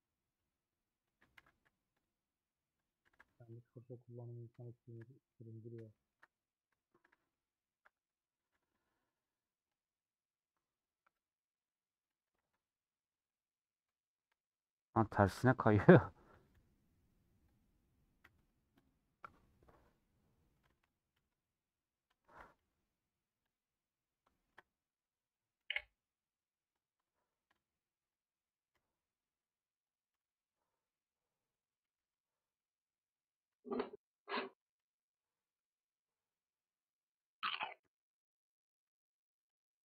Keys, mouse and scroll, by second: 1.4 g, 3.9-5.3 middle drag, 5.3-5.8 scroll up 2, 5.8-8.0 shift+middle drag, 8.0 click, 13.5 scroll down 1, 13.6 middle click, 14.2 scroll up 2, 14.6-16.0 middle drag, 16.0 click, 19.5 scroll down 1, 20.7-24.2 drag, 24.2-25.2 shift+middle drag, 25.2 click, 27.0-28.2 shift+middle drag, 28.2 click, 33.7-39.8 drag.